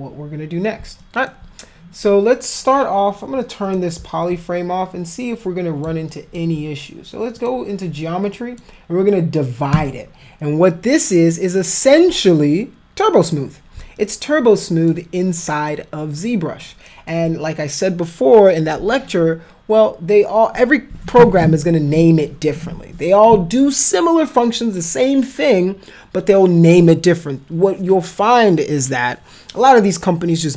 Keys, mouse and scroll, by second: 1.0 alt+click, 3.7 click, 4.2-5.9 alt+drag, 6.1 alt+click, 7.4 click, 8.4 click, 9.8 click, 13.3 click, 14.0 alt+click, 15.7 alt+click, 16.7 alt+click.